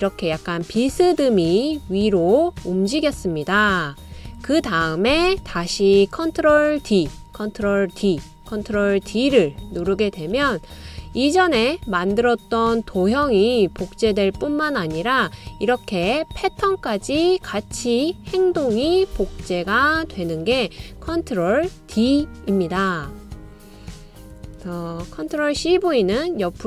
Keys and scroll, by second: 6.2 ctrl+d, 7.0 ctrl+d, 7.8 ctrl+d, 9.3 super+d, 10.6 super+d, 25.3 super+c, 25.7 super+v.